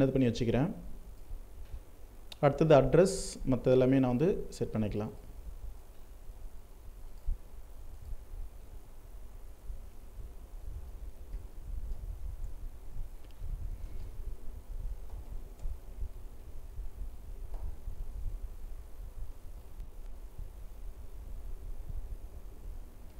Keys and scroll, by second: 3.1 alt+space, 18.1 ctrl+Left.